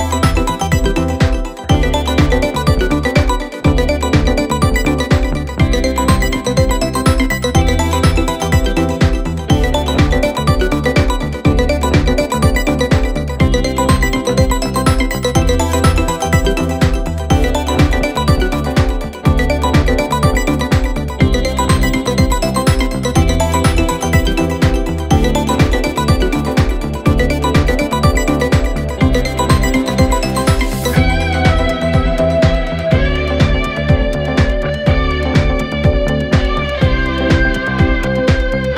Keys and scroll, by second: 2.5 4, 4.0 3, 8.1 ctrl+z, 12.4 4, 17.8 2, 25.4 4, 31.9 5.